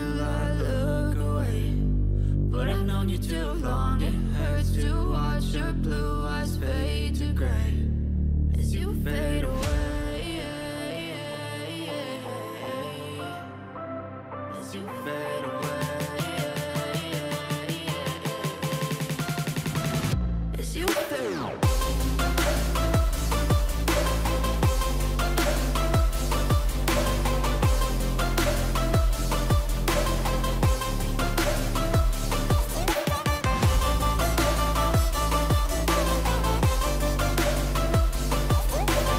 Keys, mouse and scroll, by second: 11.3 click, 13.3 ctrl+z, 15.3-16.0 ], 16.7 double click, 20.9 double click, 21.2 double click, 21.6 double click, 24.9 double click, 26.0 double click, 26.4 double click, 31.3 ctrl+z, 34.7 double click, 35.2 double click.